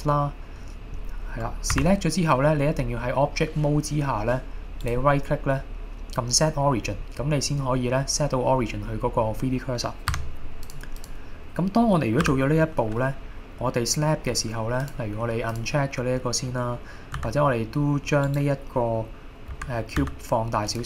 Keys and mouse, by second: 5.0-10.3 right drag, 11.1 click, 12.3 KP_7, 15.0-15.8 drag, 17.2 s, 18.3 right click, 19.5 a, 20.0 s, 20.7 click.